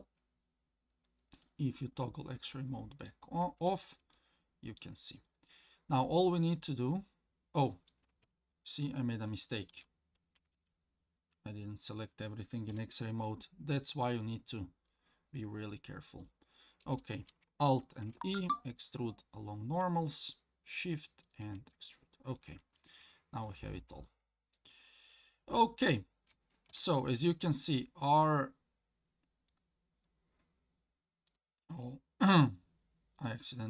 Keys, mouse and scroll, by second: 1.4 click, 2.0-3.1 middle drag, 3.7 Tab, 4.1-4.8 middle drag, 5.0-5.5 scroll down 3, 5.5 scroll up 1, 5.5-7.1 middle drag, 8.8 ctrl+z, 9.7 ctrl+z, 11.6 click, 12.7 KP_1, 14.0 click, 16.2 click, 16.7-17.4 scroll up 2, 18.0 alt+e, 21.7 middle click, 22.8 Tab, 23.6 scroll down 1, 24.0-25.8 middle drag, 26.7 KP_1, 28.2-29.5 middle drag, 31.3-33.2 drag.